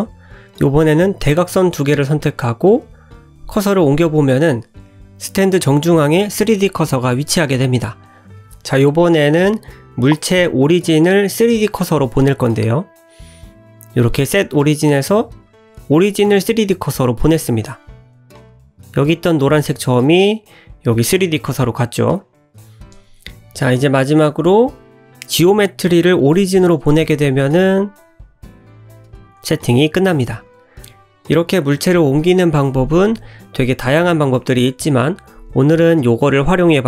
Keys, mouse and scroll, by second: 0.5 click, 1.9 shift+click, 2.5 shift+s, 4.5 scroll down 1, 4.6 middle click, 5.2 Tab, 5.7 shift+middle click, 6.4 click, 7.6 right click, 13.8 right click, 17.8 click, 18.9 click, 20.5 click, 22.9 click, 23.5 click, 23.7 right click, 30.9 click, 31.9 click, 33.5 click, 34.0 scroll down 1, 34.3 shift+middle click, 34.6 middle click, 35.8 g.